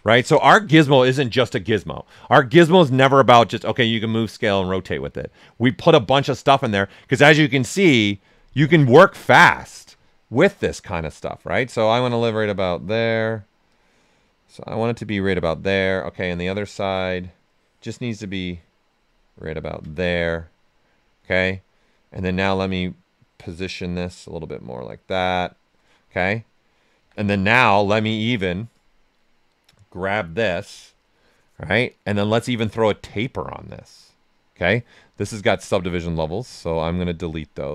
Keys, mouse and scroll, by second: 8.6 click, 9.6 alt+right click, 11.2-13.7 alt+drag, 13.7-16.2 ctrl+drag, 16.2 ctrl+click, 17.4-19.9 ctrl+drag, 19.9-22.1 right drag, 22.1-25.2 drag, 25.2-27.0 right drag, 27.0 q, 27.3 right click, 27.8 w, 28.7 click, 33.0 click, 35.2-36.6 drag, 37.2 click.